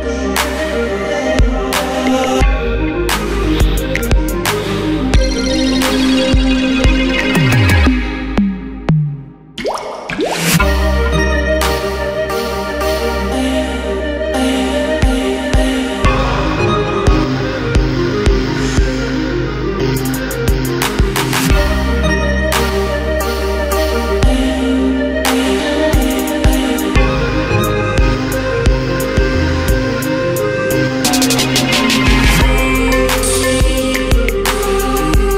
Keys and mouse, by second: 0.3 ctrl+a, 2.3 Down, 3.9 s, 5.4 g, 5.8 click, 6.2 g, 6.6 click, 7.1 g, 7.6 click, 7.8 g, 8.8 ctrl+r, 9.0 a, 9.4 click, 9.6 g, 10.0 click, 10.4 a, 11.0 click, 11.6 x, 12.1 click, 13.1 click, 14.8 z, 15.3 a, 15.9 click, 16.7 g, 17.2-18.8 drag, 19.2 middle click, 19.7 middle click, 20.2 z, 20.3 Tab, 20.6 ctrl+t, 21.2 alt+m, 21.9 g, 22.7 e, 23.0 ctrl+z, 23.4 g, 24.2 ctrl+z, 24.6-27.1 typing, 29.3 e, 30.0 e, 30.5 e.